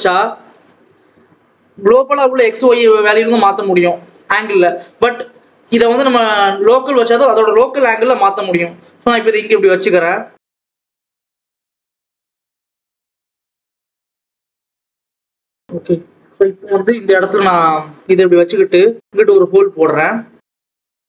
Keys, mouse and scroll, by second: 7.6-8.2 scroll down 1, 8.4 click, 9.9 click, 11.1 click, 12.3 click, 13.0 click, 13.7 click, 13.9 scroll up 1, 14.0 Tab, 14.2 s, 15.4 ctrl+s, 15.7 click, 17.4 click, 17.9 Tab, 18.3 g, 19.5 ctrl+s, 19.6 click, 20.1 click.